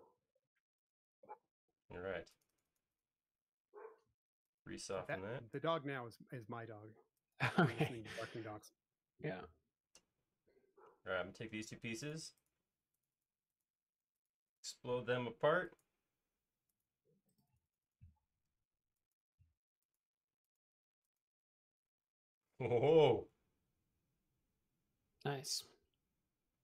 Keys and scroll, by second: 0.7 space, 21.2 space.